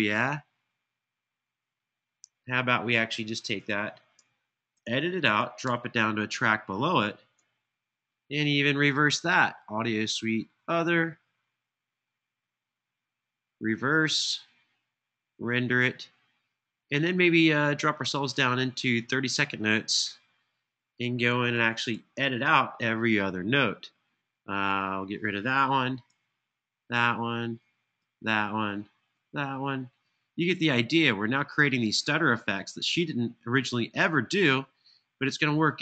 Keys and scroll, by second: 4.7 super+e, 21.2 super+], 21.7 super+], 25.9 BackSpace, 26.8 BackSpace, 27.8 BackSpace, 28.9 BackSpace, 29.7 BackSpace, 31.3 BackSpace, 32.3 BackSpace, 34.3 BackSpace, 35.1 Right.